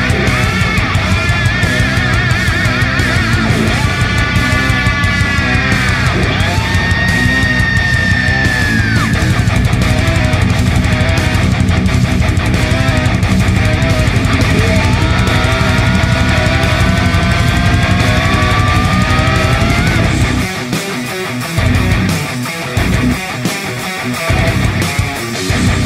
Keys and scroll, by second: 6.2 7, 8.6 ctrl+e, 10.6 space, 15.4 ctrl+l, 19.0-20.8 space, 24.2 space.